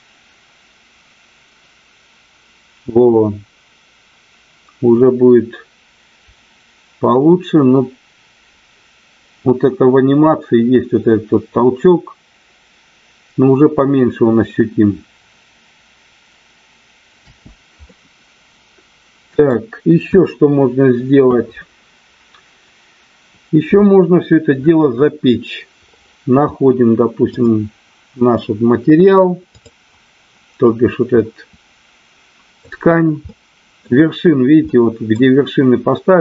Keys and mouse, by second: 17.4 space, 17.8-19.4 middle drag, 27.4 click, 29.5 click, 31.2-32.5 middle drag, 33.2-33.7 middle drag, 34.7-35.2 middle drag.